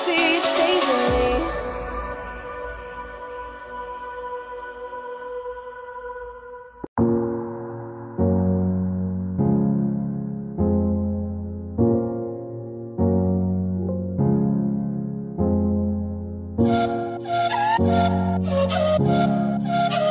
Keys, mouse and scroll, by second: 1.2-7.3 drag, 10.2 click, 10.3-11.6 drag, 14.3 click, 15.1 i, 16.4-20.1 drag.